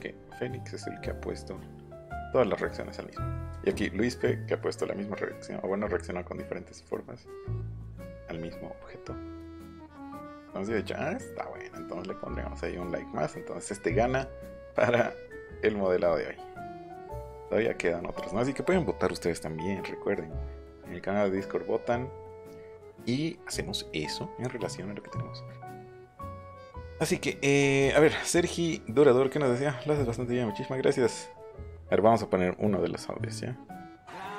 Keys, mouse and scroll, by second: 2.4 h, 8.1-8.8 scroll up 6, 9.6-9.9 scroll, 10.6 scroll, 11.5 scroll, 12.8 scroll, 12.9-13.3 scroll up 1, 13.8-14.5 scroll up 4, 15.1 scroll down 1, 16.1-16.6 scroll down 2, 18.4-19.9 scroll up 6, 21.8-22.1 scroll down 2, 22.9 scroll down 1.